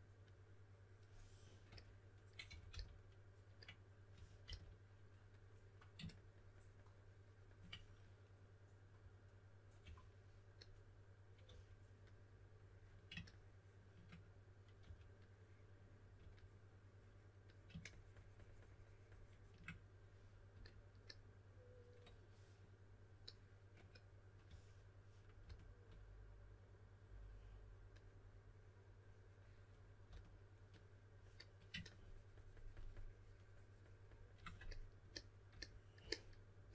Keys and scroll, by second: 2.2-4.4 typing, 9.8 typing, 11.4 typing, 14.8 typing, 16.1 typing, 24.4-25.4 typing, 30.0 typing.